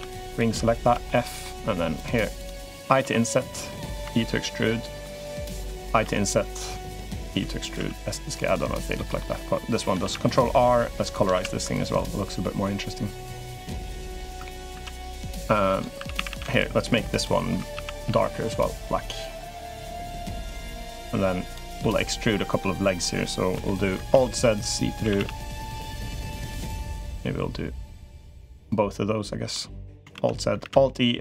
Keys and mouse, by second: 0.0 alt+shift+click, 0.6 f, 0.8 middle click, 1.7 click, 2.0 3, 2.1 click, 2.8 i, 3.8 e, 5.8 i, 7.0 e, 7.5 s, 8.7 middle click, 9.8 ctrl+r, 11.1 ctrl+r, 14.5 ctrl+r, 15.8 3, 15.9 a, 16.1 a, 17.0 alt+shift+click, 17.5 a, 17.8 g, 20.0 middle click, 21.2 click, 21.6 middle click, 23.3 KP_3, 23.9 alt+z, 24.8 a, 24.9 a, 25.5 b, 29.3 middle click, 29.9 alt+z, 30.4 alt+e.